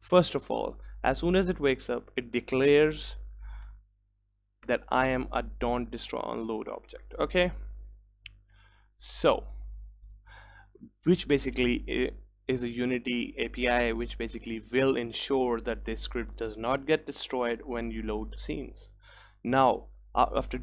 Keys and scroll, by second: 7.0 Return, 9.2 Return, 10.9 ctrl+s.